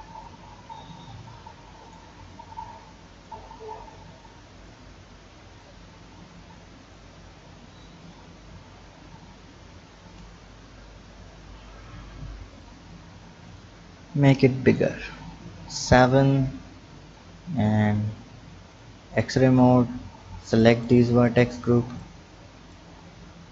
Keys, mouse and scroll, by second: 1.8 click, 2.3 click, 3.4 Tab, 4.2 click, 5.6-7.9 drag, 12.0-12.5 scroll down 1, 12.5 click, 13.4 click, 13.9 Tab, 14.3-15.0 scroll down 2, 15.0-15.7 scroll up 1, 15.7 KP_7, 17.0 click, 17.8-18.4 scroll up 3, 18.7 drag, 19.2-19.6 scroll down 3, 20.0 b, 20.7 click, 21.2 click, 21.7 b, 23.1 b.